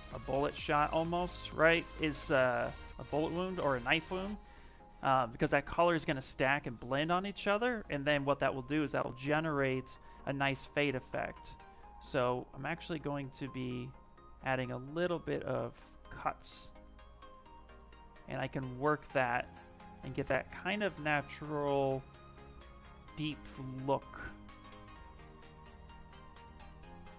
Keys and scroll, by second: 0.2 1, 1.5 ctrl+z, 1.7 ctrl+z, 2.1 ctrl+z, 2.8 ctrl+z, 3.3 ctrl+z, 3.6 ctrl+z, 3.9 ctrl+z, 4.2 ctrl+z, 4.7 ctrl+z, 5.1 ctrl+z, 5.6 ctrl+z, 6.5 ctrl+z, 7.1 ctrl+z, 9.5 s.